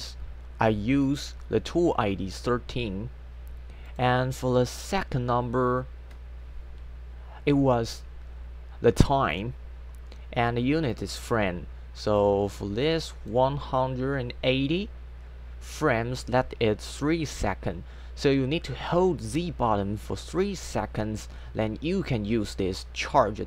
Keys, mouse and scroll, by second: 3.9 click, 4.4 click, 10.9 click, 12.2 click, 22.8 click.